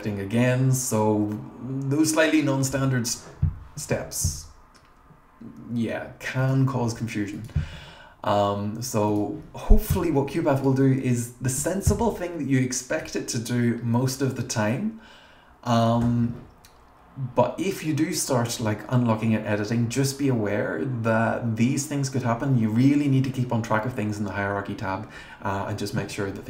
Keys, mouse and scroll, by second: 10.5 click.